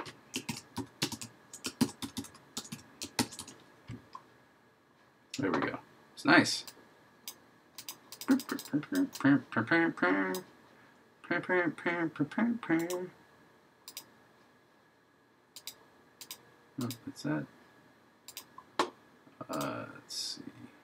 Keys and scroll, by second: 0.5 shift+h, 1.8 shift+k, 3.2 shift+1.